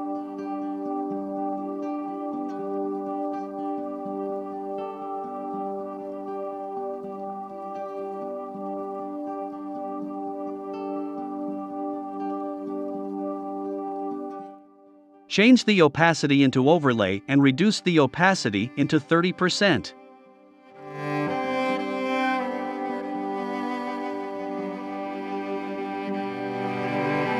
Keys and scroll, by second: 1.7 super+z, 11.3 i, 13.5 v, 14.7-15.6 typing, 18.6-19.5 typing.